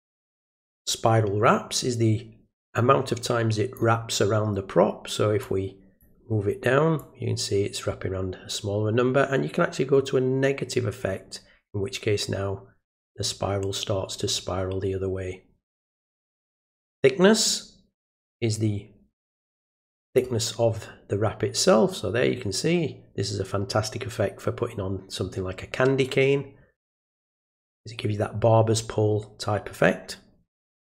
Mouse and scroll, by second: 0.8-3.7 drag, 5.4 click, 7.0-16.4 drag, 17.5-20.1 drag.